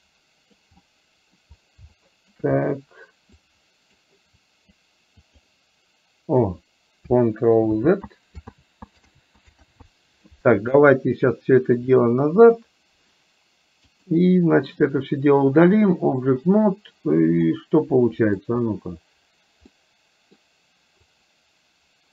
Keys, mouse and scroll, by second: 0.0 click, 0.9 middle click, 2.0 shift+middle click, 3.7 click, 4.5 click, 5.3 click, 7.8 ctrl+z, 8.5 ctrl+z, 9.2 ctrl+z, 9.7 ctrl+z, 12.2 click, 14.0 click, 15.9 click, 17.5 middle click, 19.8 middle click, 21.0 click.